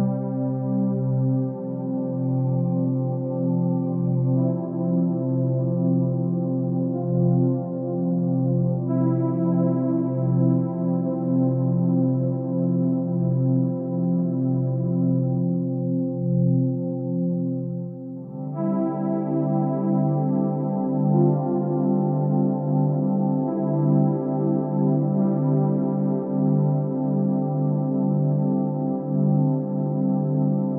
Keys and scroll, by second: 23.3 ctrl+z.